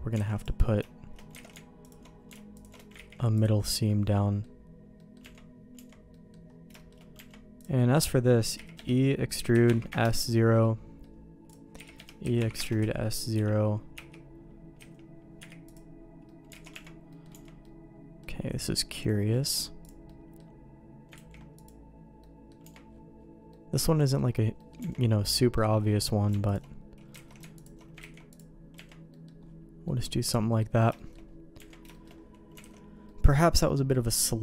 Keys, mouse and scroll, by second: 0.2 alt+a, 0.4 click, 1.4 alt+a, 1.9 alt+click, 2.5 alt+shift+click, 3.0 ctrl+e, 3.9 middle click, 5.0 middle click, 5.2 Tab, 5.8 Tab, 6.1 middle click, 6.8 shift+middle click, 7.2 Tab, 7.8 middle click, 8.6 e, 9.5 s, 10.6 middle click, 11.5 click, 11.8-14.8 typing, 15.8 u, 16.3 middle click, 16.5 alt+a, 16.7 Tab, 17.1 middle click, 17.3 Tab, 17.6 middle click, 18.6 middle click, 19.8 click, 20.1 middle click, 21.1 ctrl+e, 22.2 middle click, 22.6 Tab, 23.5 middle click, 24.6 middle click, 24.8 Tab, 25.4 middle click, 26.5 alt+click, 27.2 alt+a, 28.0 ctrl+e, 28.7 Tab, 29.1 middle click, 29.9 middle click, 30.1 click, 31.0 shift+middle click, 31.6 Tab, 31.9 shift+middle click, 32.6 alt+a, 33.1 middle click, 33.9 middle click.